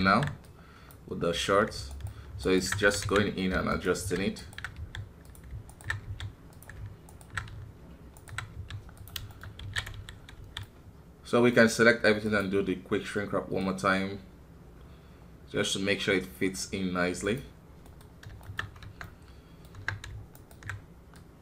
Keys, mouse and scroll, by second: 0.0 alt+KP_1, 0.4 click, 1.2-1.9 scroll up 1, 1.9 alt+right click, 2.8 s, 4.3 alt+right click, 4.7 s, 5.7 alt+right click, 6.0 s, 7.1-8.5 alt+right drag, 8.5 s, 9.3 shift+middle click, 9.5 scroll up 1, 9.6 alt+a, 9.9 KP_1, 10.1 scroll down 2, 10.3 a, 10.6-15.2 middle drag, 17.8 middle click, 18.1-18.8 scroll up 3, 18.4 shift+middle click, 18.8 Tab, 19.0 middle click, 19.7 Tab, 20.3-21.4 alt+right drag.